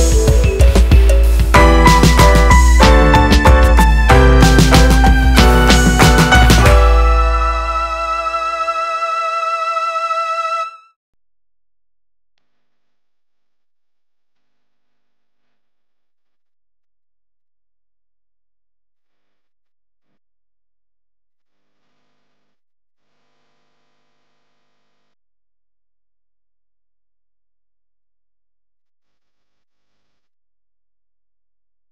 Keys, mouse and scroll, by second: 3.9-5.7 drag, 5.7 s, 8.1 click, 10.1-11.3 middle drag, 11.3 KP_1, 12.9 click, 15.2-16.1 scroll up 3, 16.1-17.0 scroll up 1, 17.0-19.1 drag, 20.6 click, 22.5 Delete, 24.2-26.2 middle drag, 27.1 KP_1, 27.8 middle click, 28.8 KP_1, 29.2 click, 30.8-31.8 drag.